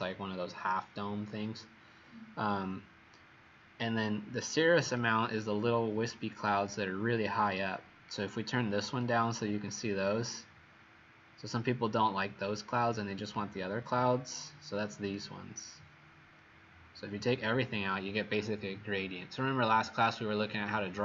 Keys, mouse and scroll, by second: 4.9 click.